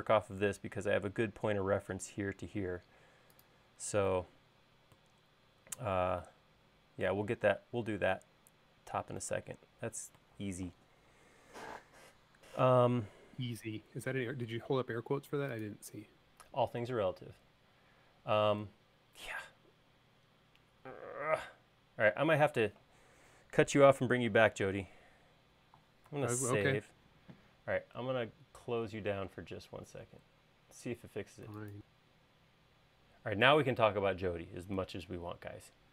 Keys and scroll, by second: 26.5 super+s.